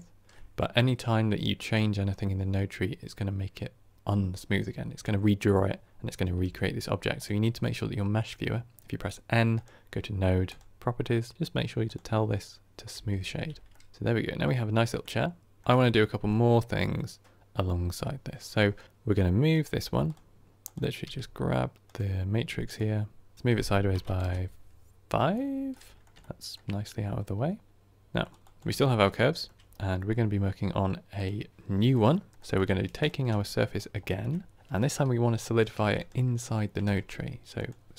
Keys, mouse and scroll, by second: 1.6-11.9 drag, 13.6-19.6 middle drag, 19.6-20.1 drag, 22.6-25.6 drag, 25.6-28.4 middle drag, 28.4 click, 28.7-29.6 shift+middle drag, 29.6-31.1 scroll down 2, 31.1 click, 33.7 scroll up 3, 34.0-37.9 shift+middle drag.